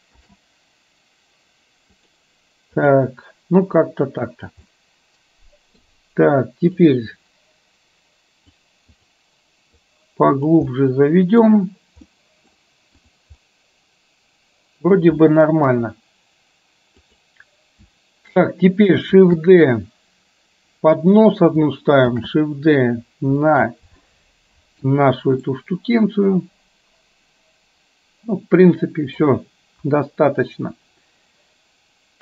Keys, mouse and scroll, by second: 0.3 shift+d, 2.9 click, 4.9-5.9 middle drag, 6.9-8.6 drag, 9.0 click, 9.9 click, 10.8 middle click, 12.1 middle click, 13.5-14.9 middle drag, 15.8 KP_1, 17.1 click, 19.4 shift+d, 22.3 shift+d, 24.1 middle click, 25.5-29.3 middle drag, 29.9 KP_1.